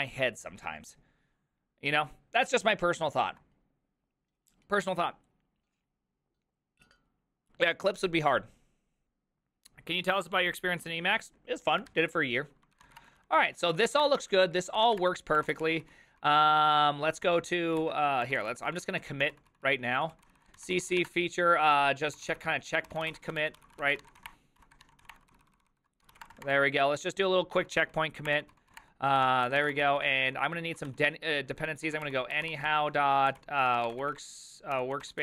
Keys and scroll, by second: 12.6-16.7 typing, 14.6 ctrl+d, 17.3 ctrl+p, 17.8 ctrl+c, 18.0-35.2 typing, 25.7 ctrl+c, 28.3 Return, 28.8 Return, 29.2 ctrl+w, 29.3 ctrl+o.